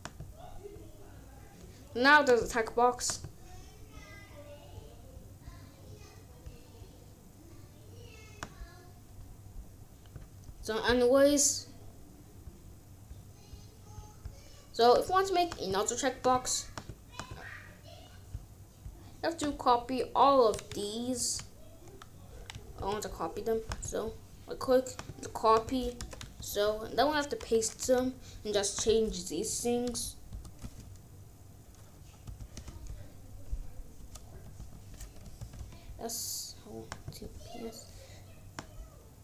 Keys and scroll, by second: 21.1 ctrl+x, 22.6 ctrl+z, 25.9 Return, 26.3 ctrl+v, 27.7 ctrl+s, 29.8 BackSpace, 32.2 p, 32.5 s, 34.3-36.0 typing, 37.2 t.